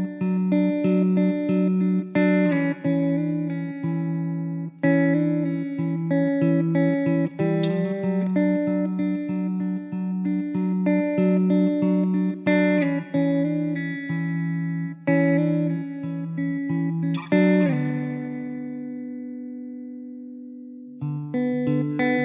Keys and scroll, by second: 2.6 ctrl+r, 4.6 3, 7.2 s, 10.5 3, 11.2 s, 12.1 `, 13.2 ctrl+r, 14.9 ctrl+r, 16.5 ctrl+z, 16.8 g, 18.6 3, 20.3 r, 20.9 s, 21.8 e.